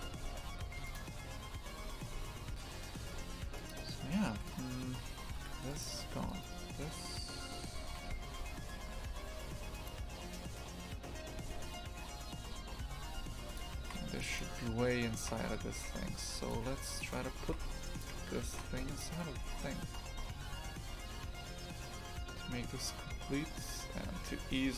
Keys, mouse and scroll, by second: 0.0 shift+f, 2.6 shift+f, 4.5-5.8 right drag, 5.8 Delete, 6.3-7.9 right drag, 7.9 shift+f, 13.6 click, 13.8 shift+f, 15.2 shift+f, 17.0 right click, 17.5 shift+f, 18.1 Tab, 18.6 shift+f, 19.4 g.